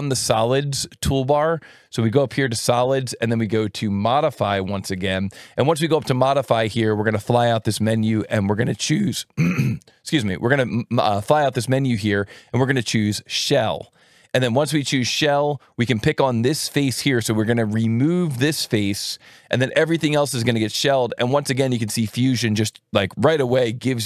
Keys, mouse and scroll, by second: 1.0 click, 2.0 click, 3.8 click, 4.9 alt+1, 6.2 click, 13.9 click, 18.5 click.